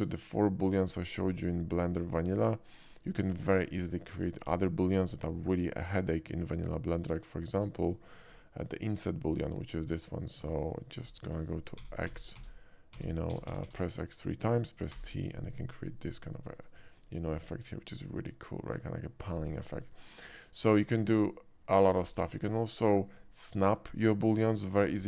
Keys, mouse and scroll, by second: 1.0 shift+middle drag, 1.5-1.8 shift+middle drag, 2.2 shift+middle drag, 2.6 shift+middle click, 3.1 shift+middle drag, 3.8 shift+middle drag, 4.2 shift+middle click, 7.1-7.6 drag, 7.9-8.3 right drag, 8.3 click, 8.8-9.6 drag, 11.9 x, 12.2 x, 12.6 x, 15.2 t, 16.6 click, 17.0 click, 17.6-19.8 middle drag, 20.5-21.8 middle drag, 22.0 scroll down 1, 22.5 shift+middle click, 25.0 x.